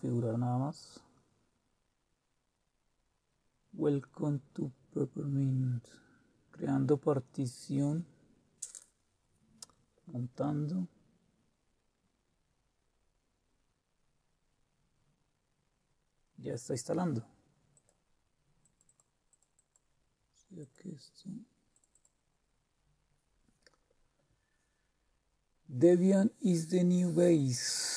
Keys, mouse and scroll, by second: 17.7-21.6 drag.